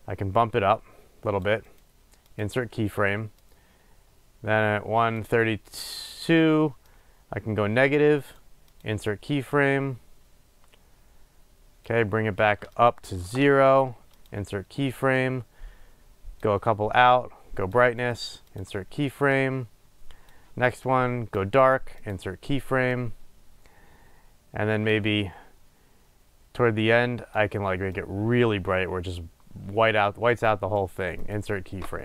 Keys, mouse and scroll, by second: 2.6-3.8 right drag, 3.8-9.1 drag, 9.1-10.0 right drag, 10.0-14.5 drag, 13.6 Return, 14.5-15.4 right drag, 15.4-18.8 drag, 18.8 right click, 19.7-22.4 drag, 22.4-23.2 right drag, 23.2 click, 28.3 click, 29.0-31.6 drag, 31.6-32.0 right drag.